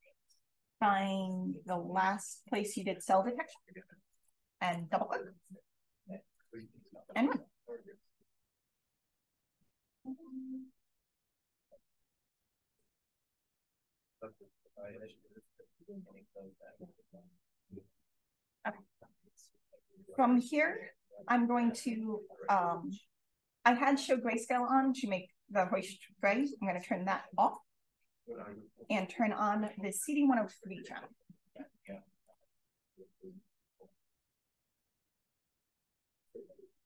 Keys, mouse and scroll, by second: 2.4 click, 4.5 click, 7.0 click, 16.2-16.8 scroll up 2, 18.0 click, 19.5 click, 26.3 click, 26.7 click, 27.4 click, 29.6 click, 32.5-33.2 scroll up 1, 33.2-33.6 scroll up 1, 34.2 d, 34.6-35.2 scroll up 1.